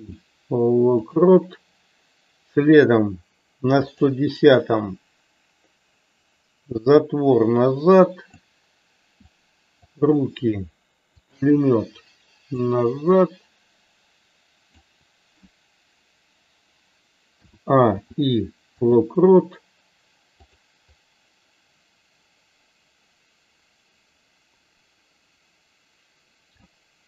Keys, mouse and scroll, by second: 4.0 click, 7.1 click, 9.5 click, 11.3 shift+click, 12.9 click, 20.5 click, 21.0-26.7 drag.